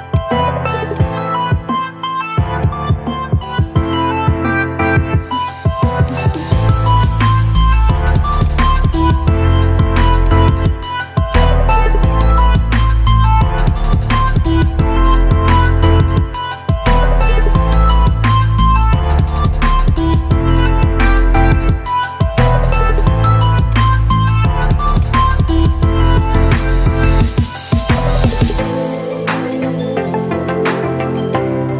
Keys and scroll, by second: 3.5-5.2 typing, 6.1 Return, 16.4-18.2 typing, 19.9 Return, 27.7 ctrl+k, 31.6 c.